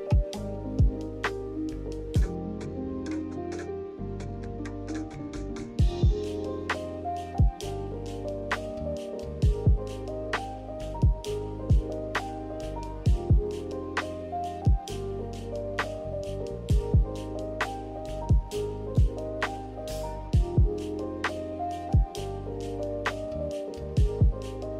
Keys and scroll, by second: 2.6 ctrl+h, 3.2 ctrl+h, 4.0 z, 4.9 Right, 5.6 Left, 7.5 Left.